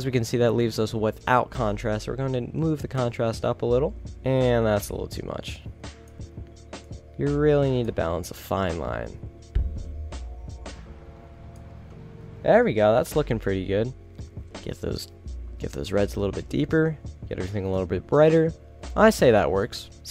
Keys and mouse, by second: 14.5-15.1 middle drag, 15.1 middle drag, 15.3 middle click, 16.2 middle drag, 16.4 middle click, 19.6-19.9 middle drag.